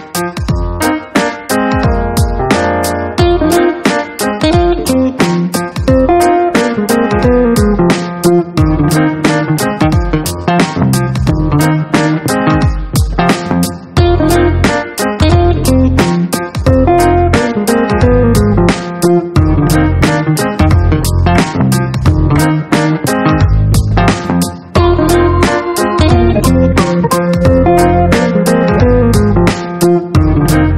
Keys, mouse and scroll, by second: 2.0 click, 3.1 click, 3.6 right click, 5.7 click, 6.5 click, 7.5 click, 8.7 click, 9.2 click, 10.4 click, 11.2 ctrl+d, 13.2 click, 14.7-17.2 right drag, 18.6 click, 20.2 click, 21.0 click, 22.3 click, 25.1 click, 27.5 click, 28.5 click, 30.2 click.